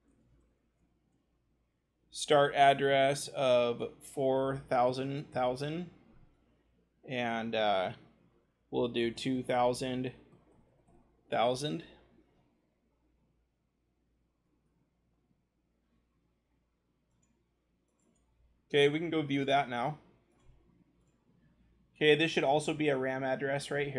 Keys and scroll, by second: 0.3-1.2 typing, 4.7 0, 9.1 0, 19.0-21.4 scroll.